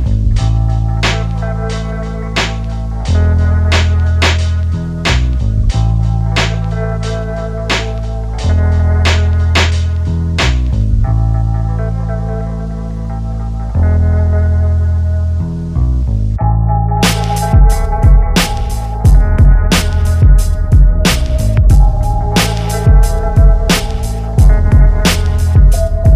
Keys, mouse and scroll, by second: 0.6 2, 1.6-3.3 middle drag, 1.6-3.5 right drag, 4.4 shift+r, 5.6 ctrl+r, 6.8 middle click, 7.1 1, 7.7-9.7 drag, 9.7-11.6 middle drag, 10.1 click, 10.1 right click, 11.6 ctrl+b, 14.3-16.0 shift+drag, 15.3 3, 16.0 middle click, 18.7 middle click, 20.5 BackSpace, 21.1 middle click, 22.8-23.8 middle drag, 24.3 ctrl+Tab, 25.8 click, 25.8 middle click, 25.8 right click.